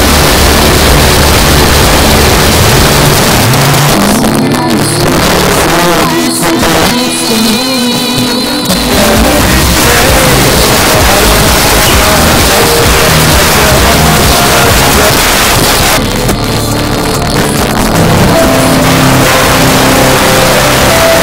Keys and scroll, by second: 3.2 Page_Down, 15.1 Page_Down.